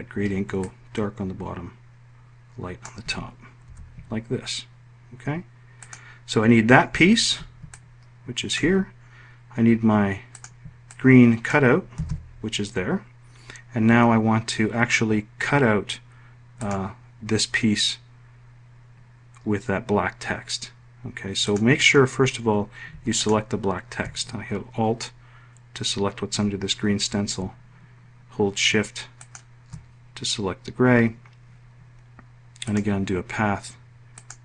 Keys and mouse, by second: 0.2-2.5 ctrl+drag, 3.2 F1, 8.2-10.1 drag, 10.4 ctrl+click, 11.5 ctrl+z, 16.1 click, 21.0 click, 22.7 alt+click, 28.7 shift+click, 32.1-34.4 drag.